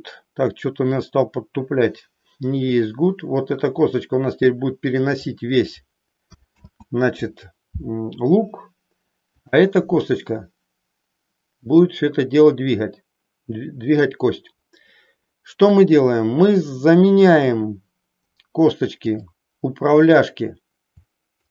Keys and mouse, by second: 1.1-5.3 drag, 6.6 ctrl+z, 9.3-10.8 drag, 11.8-14.1 drag, 19.2-20.4 drag.